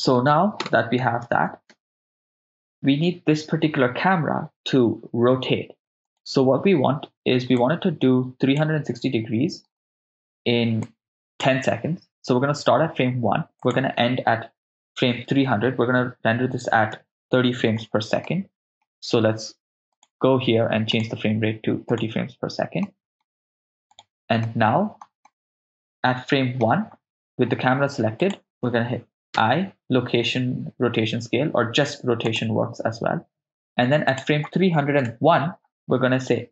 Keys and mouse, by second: 0.7 KP_0, 1.7 shift+space, 2.4 shift+space, 6.1 right click, 7.6 click, 10.9 click, 13.6-17.3 drag, 15.3 BackSpace, 15.4 BackSpace, 18.2 middle click, 19.9 click, 21.0-24.0 drag, 24.4 middle click, 25.3-26.6 ctrl+middle drag, 28.2 click, 28.4 right click, 28.4 r, 29.3 i, 34.1 click, 35.0 Right.